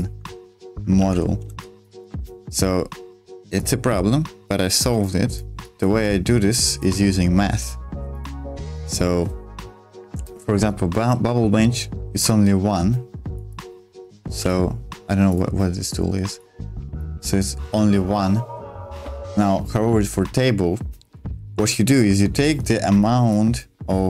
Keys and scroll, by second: 1.0 ctrl+z, 1.4 space, 2.2 ctrl+z, 14.3 ctrl+z.